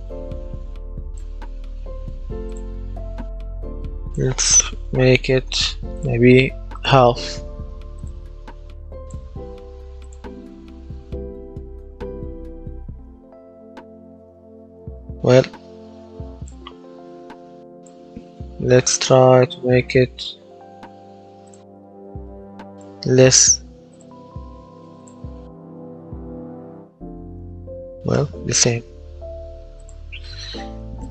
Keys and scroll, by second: 3.2 Delete, 4.6 KP_0, 4.8 KP_Decimal, 5.0 KP_5, 5.3 Return, 10.4 w, 10.8 space, 12.7 space, 14.7 Escape, 18.9 KP_0, 19.2 KP_Decimal, 19.6 KP_0, 19.9 KP_5, 20.3 Return, 25.2 w, 25.5 space, 28.0 Escape.